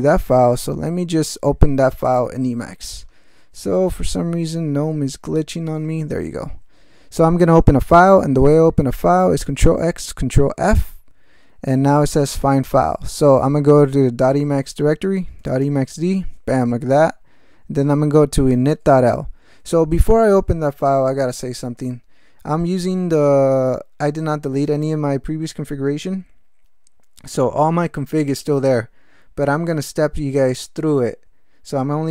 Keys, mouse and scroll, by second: 0.7 d, 2.1 click, 4.4 Right, 4.8 Up, 9.5 ctrl+x, 10.3 ctrl+f, 15.0-16.0 typing, 18.4-19.3 typing.